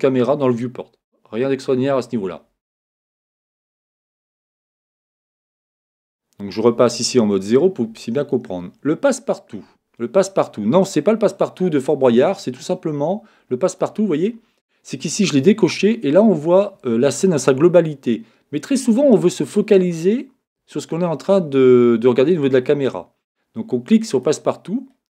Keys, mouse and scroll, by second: 4.3-6.7 middle drag, 6.7 KP_0, 13.7-16.6 drag, 24.1-25.1 drag.